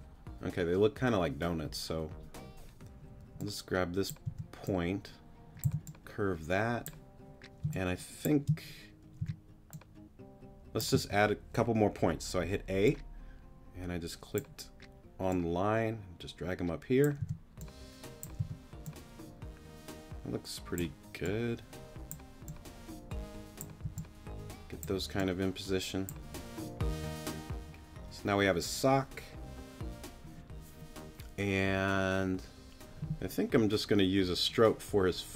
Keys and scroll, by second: 4.2 t, 5.6 c, 7.6 space, 9.2 t, 10.9 a, 12.4 a, 17.2 t, 18.4 t, 23.8 t.